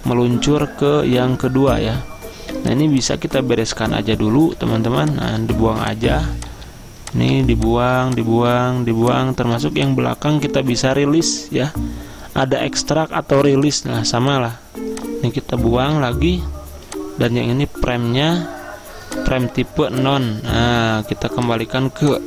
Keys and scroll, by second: 4.5 Delete, 5.4 Delete, 6.2 Delete, 6.6 Delete, 7.3 Delete, 7.9 Delete, 8.5 Delete, 9.6 Delete, 15.1 Delete, 16.0 Delete.